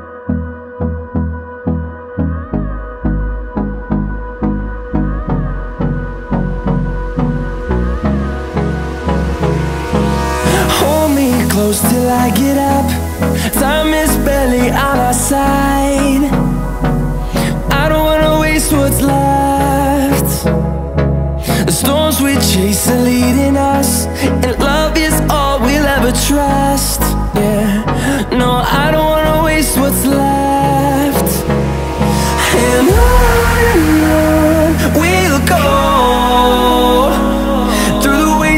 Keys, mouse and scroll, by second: 1.2 ctrl+j, 2.5 right click, 4.0 click, 11.0 click, 12.4-13.0 typing, 14.5 click, 15.6-17.0 typing, 18.1 click, 19.1-20.2 typing, 21.1 click, 23.2-23.6 typing, 24.7 click, 25.8-27.0 typing, 28.0 click, 29.3-31.0 typing, 32.2 click, 33.3-33.8 typing, 35.1 click, 36.2-36.8 typing, 38.2 click.